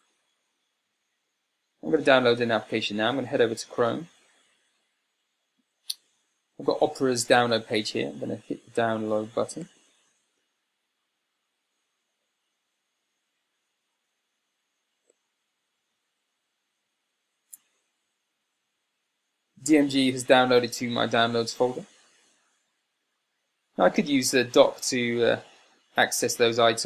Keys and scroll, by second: 1.3 super+Tab.